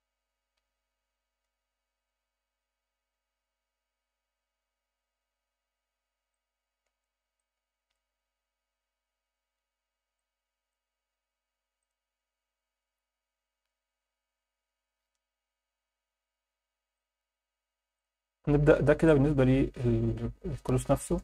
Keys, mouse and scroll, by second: 1.8 scroll up 2, 5.6 scroll up 1, 6.5-7.2 alt+shift+middle drag, 7.5 ctrl+alt+middle click, 10.3-11.0 ctrl+alt+middle drag, 11.9 click, 13.0-13.6 scroll up 2, 13.6-14.1 scroll down 1, 14.1-14.9 scroll up 1, 16.9 click, 17.9 click, 18.7 scroll down 1, 19.0-21.0 alt+middle drag.